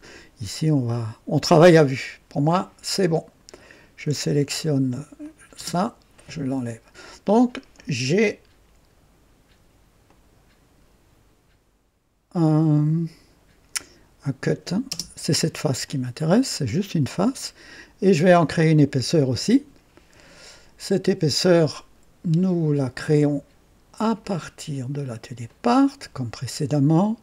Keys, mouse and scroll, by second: 0.5-2.5 drag, 5.2 click, 5.6 space, 10.0 click, 14.4 click, 14.9 space, 15.8-18.5 drag, 18.6 right click, 24.2 click, 25.6 click.